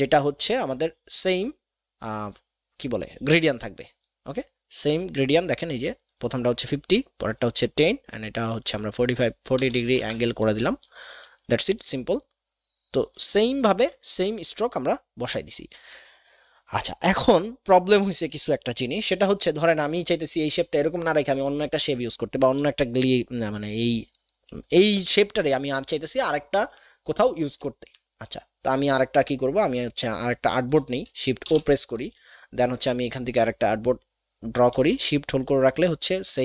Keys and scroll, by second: 9.7 KP_4, 9.7 KP_0, 9.9 Return, 31.4 shift+o.